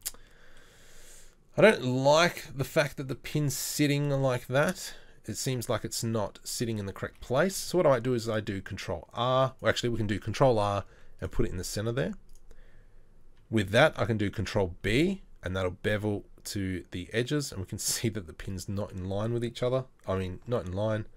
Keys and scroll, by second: 7.2 Tab, 7.8 ctrl+r, 10.9 z, 12.0 z, 13.8 ctrl+b, 20.1 ctrl+l.